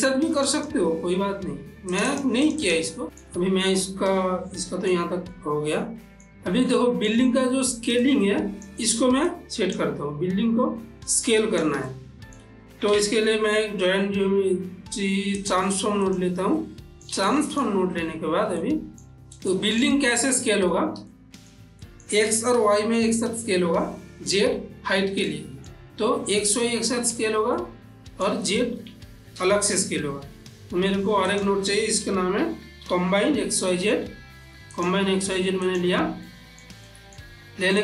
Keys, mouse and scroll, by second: 0.6 click, 2.1 click, 3.0-7.2 middle drag, 8.4-11.0 drag, 11.5 click, 12.3 ctrl+middle click, 13.5 shift+a, 15.7 click, 16.9-18.9 ctrl+middle drag, 18.9 ctrl+middle click, 19.9 middle click, 21.8 shift+middle click, 25.6-27.9 middle drag, 27.9-29.5 middle drag, 29.5 shift+a, 31.6 click, 32.4-34.5 typing, 35.1 click, 36.0 click, 36.7 ctrl+middle click.